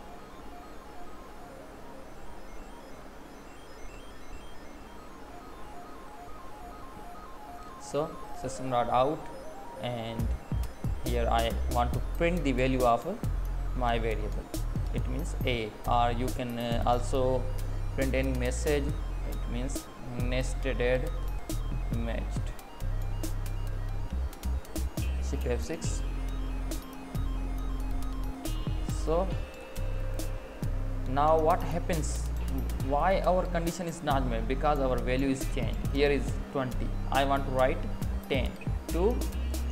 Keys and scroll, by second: 0.4 Down, 1.0 Up, 1.4 Left, 4.4 Down, 4.6 Left, 6.4 Up, 8.6 Tab, 21.2 space, 37.2 Left.